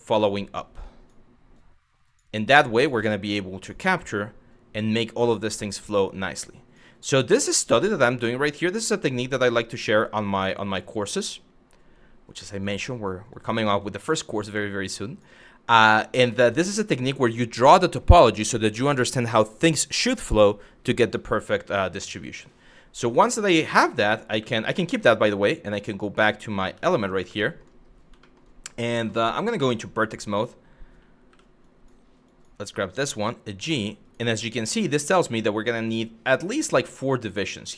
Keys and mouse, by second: 0.5 click, 1.2 click, 2.5 click, 3.8 click, 5.6 click, 7.5 click, 10.6-12.2 drag, 13.0 click, 13.4 click, 14.5 click, 15.4 click, 22.1-23.4 drag, 24.0 q, 24.5 Tab, 25.4 click, 25.8 click, 26.4 Tab, 27.0 middle click, 27.8 middle click, 29.5 1, 30.9 w, 31.3 click, 32.0 click, 32.7 g, 33.6 click, 35.0 click, 35.3 g, 36.0 click.